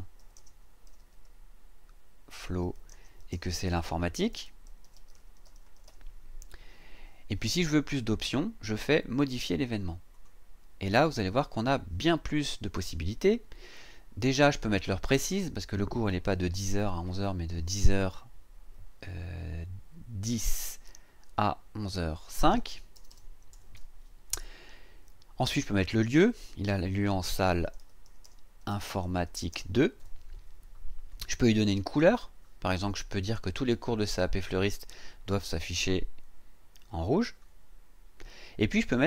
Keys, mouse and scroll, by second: 0.0-1.1 typing, 2.2-6.3 typing, 10.1 click, 15.2 click, 16.8 BackSpace, 20.2 KP_1, 20.6 KP_0, 21.8 click, 22.9 BackSpace, 23.5 KP_0, 23.7 KP_5, 25.7 click, 27.0-30.0 typing, 31.1 click, 37.1 click.